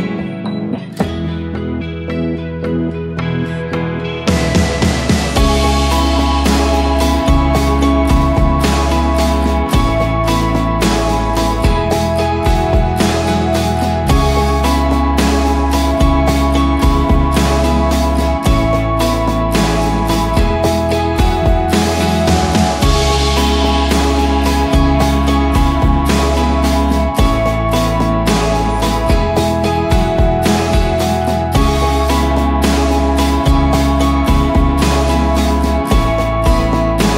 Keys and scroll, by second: 0.0 v, 1.4 ctrl+d, 1.9 shift+Up, 2.1 shift+Up, 2.3 shift+Up, 2.4 shift+Up, 3.8 ctrl+[, 4.9 ctrl+[, 8.8 ctrl+g, 9.4-11.4 typing, 12.6 Up, 13.1 Up, 14.6 ctrl+[, 15.0 ctrl+[, 24.4-26.5 typing, 25.7 Tab, 26.8 Return, 34.4 0, 34.7 Tab, 34.9 Tab, 35.1 0, 35.3 Return, 36.6 ctrl+], 36.8 ctrl+].